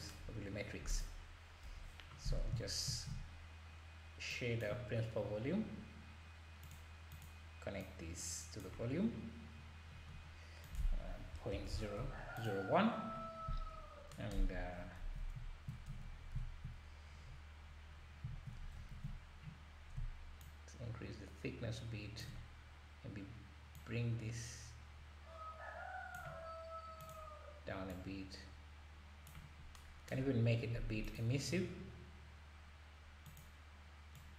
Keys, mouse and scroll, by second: 0.5-0.9 scroll down 2, 0.9 click, 1.7 Delete, 2.3-2.9 scroll up 2, 2.9 shift+a, 7.8-9.9 drag, 9.9-10.6 scroll up 1, 10.6 scroll up 4, 10.6-11.7 drag, 11.7 KP_0, 12.4 click, 12.4 KP_0, 13.4-14.1 scroll up 2, 14.7-15.4 scroll down 1, 15.9 z, 16.2 scroll up 2, 17.0-17.6 scroll up 4, 17.6-18.0 scroll down 1, 18.9 ctrl+s, 20.4-23.9 shift+drag, 27.0 click, 31.0 click, 33.3 click.